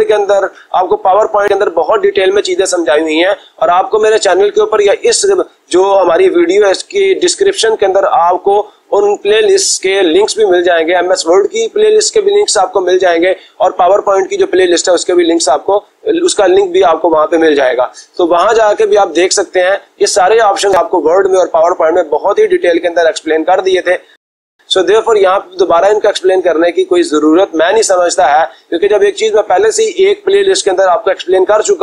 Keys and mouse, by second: 1.1-2.2 drag.